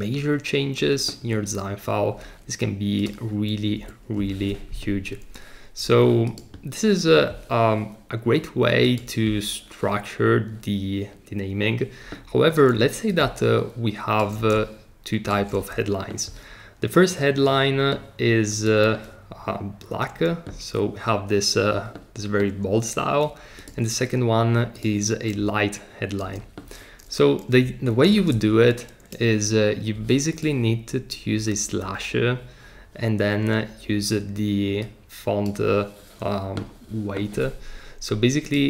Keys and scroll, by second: 3.7 BackSpace, 28.1 super+r.